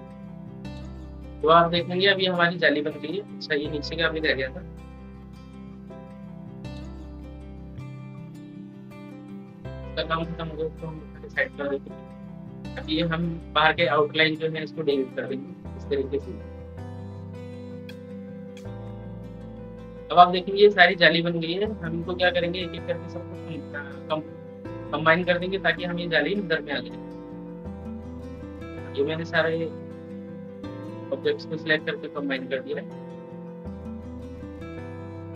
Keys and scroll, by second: 4.5 ctrl+z, 4.8 ctrl+z.